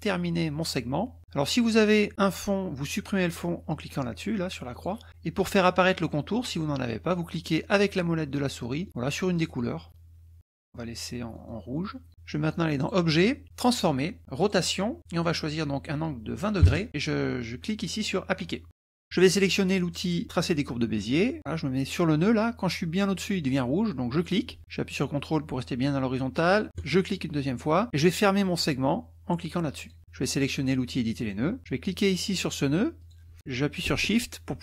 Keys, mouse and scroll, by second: 4.7 click, 8.3 click, 9.5 click, 10.5 click, 11.3 click, 12.9 drag, 13.7 click, 14.4 click, 15.2 click, 16.6 KP_2, 18.7 click, 21.0 click, 24.2 click, 26.7 ctrl+click, 29.9 click, 31.2 click, 33.1 click.